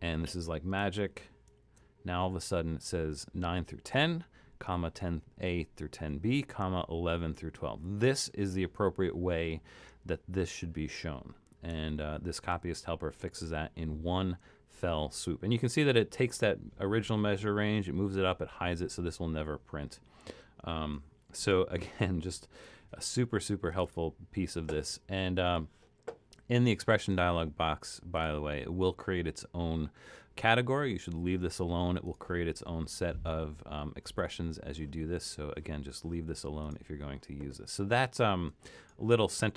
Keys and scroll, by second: 1.0 super+=, 1.5 super+=, 11.9 super+-, 12.5 super+-.